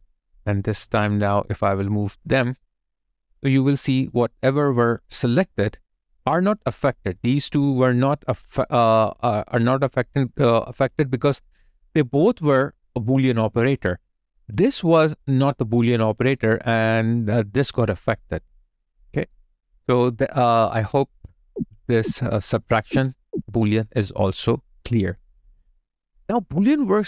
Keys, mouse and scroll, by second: 1.0 double click, 4.9 alt+click, 16.8 alt+click, 18.6 alt+right click, 18.9 alt+click, 20.5 alt+click, 21.3 alt+Left, 23.8 ctrl+z, 25.0 alt+right click, 25.4 alt+click.